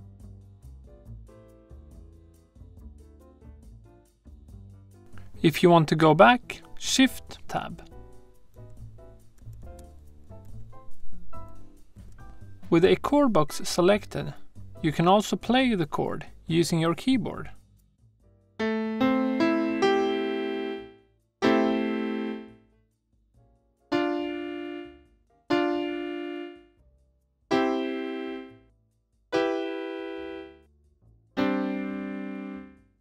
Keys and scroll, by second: 0.2 shift+g, 0.7 shift+Tab, 1.9 Right, 2.4-4.0 typing, 8.5 shift+Tab, 10.8 Tab.